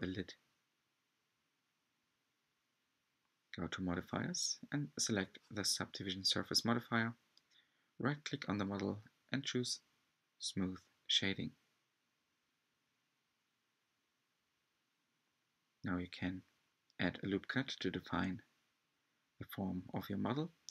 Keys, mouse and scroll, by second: 0.0 s, 2.3 alt+click, 2.7 s, 4.7 alt+click, 5.1 g, 6.0 scroll down 4, 6.2 Tab, 6.6-8.1 middle drag, 8.1-9.6 drag, 11.1 click, 12.5-12.9 right drag, 12.9-14.5 scroll up 5, 13.5 Tab, 15.0 r, 18.5 Tab, 18.8 Tab, 19.1 Tab, 20.0-20.7 typing.